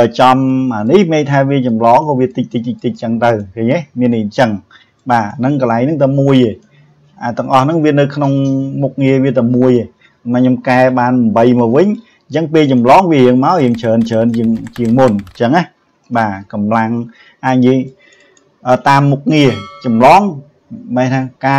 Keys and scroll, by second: 16.1 ctrl+z.